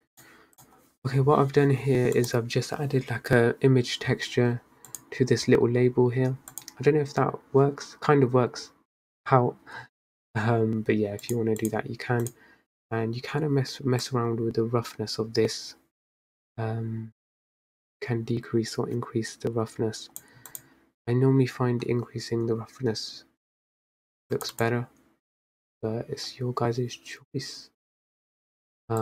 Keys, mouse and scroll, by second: 0.2 drag, 0.9 click, 2.5 click, 5.3 click, 6.9 click, 11.8 click, 12.6 click, 14.3-17.6 drag, 20.9 click, 24.9 click, 28.4 scroll down 1.